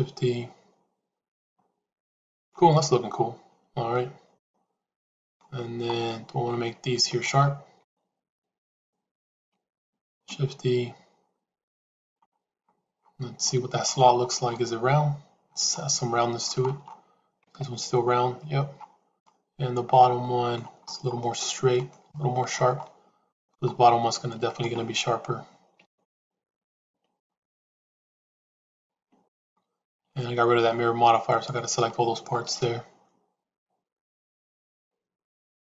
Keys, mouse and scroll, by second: 2.7-5.3 middle drag, 9.9 shift+e, 13.3 shift+middle click, 16.1 shift+middle click, 17.3 Tab, 19.1-20.5 shift+middle drag, 21.3 middle click, 22.1 shift+middle click, 22.7 middle click, 24.4 shift+click, 27.1-28.7 middle drag, 29.0 shift+a, 29.2 click, 30.0 middle click, 30.7 shift+a, 34.2 shift+z, 34.6-35.7 middle drag.